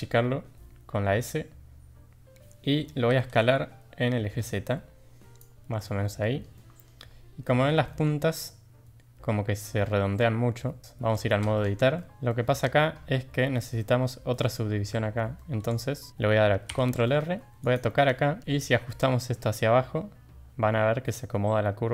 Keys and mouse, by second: 3.0 s, 5.8-6.4 middle drag, 6.6 middle drag, 7.4 middle drag, 7.8 shift+middle drag, 11.4 Tab, 11.9 drag, 12.1 Tab, 12.3-12.6 drag, 15.3 shift+middle drag, 16.7 ctrl+r.